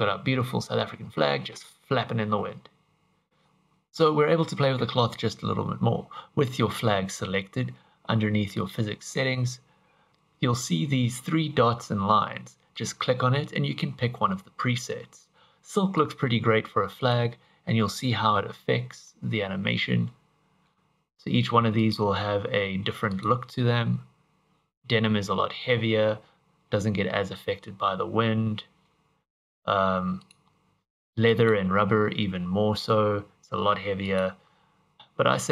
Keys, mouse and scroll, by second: 3.4 click, 8.5 click, 12.7 click, 17.0 click, 18.4 middle click, 21.8 click, 30.3 click, 34.1 click.